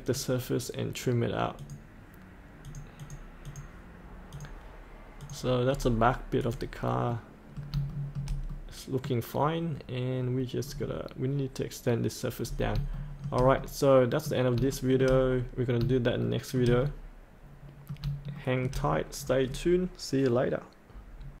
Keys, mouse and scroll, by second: 0.0 click, 4.3 click, 5.6 scroll up 1, 6.4 click, 7.0 middle click, 7.9 shift+middle click, 8.5-9.6 middle drag, 10.3 scroll up 1, 10.6 scroll down 1, 12.4-12.7 scroll up 1, 12.9 shift+middle click, 13.6 middle click, 14.7 shift+middle click, 15.4-15.7 scroll up 1, 16.2 shift+middle click, 18.3 shift+middle click, 18.8-21.4 scroll down 1.